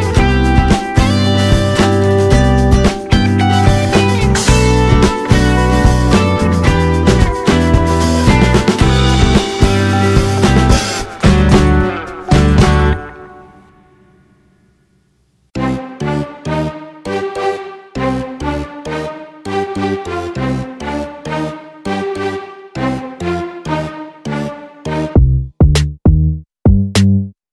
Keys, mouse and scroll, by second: 0.2 click, 1.5 click, 5.6 click, 6.2 click, 7.2 click, 12.3 click, 14.9 click, 22.3 drag, 23.1 click, 25.0 click.